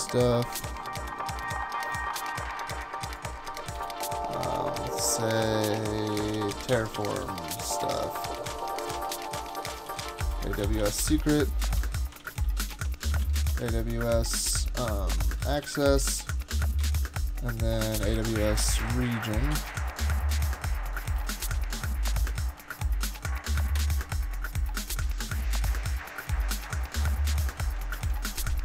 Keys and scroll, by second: 3.3-4.2 typing, 6.1-13.8 typing, 9.4 Return, 15.2-20.0 typing, 16.8 Return, 21.2 shift+super+{, 22.3 shift+super+{, 23.8 Escape, 27.3 shift+super+}, 28.0 super+s.